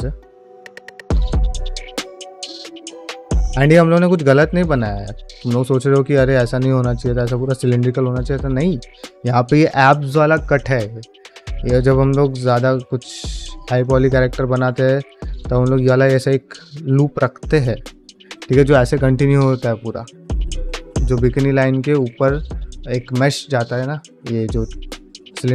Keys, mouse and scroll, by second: 2.3 middle click, 2.6 shift+click, 3.9 ctrl+middle click, 4.9 middle click, 5.1 shift+middle click, 6.4 shift+click, 7.8 middle click, 8.6 middle click, 11.9 middle click, 12.6 shift+click, 13.5 f, 13.7 shift+middle click, 14.0-15.1 shift+drag, 15.2 middle click, 16.3 middle click, 20.9 middle click, 23.9 shift+middle click.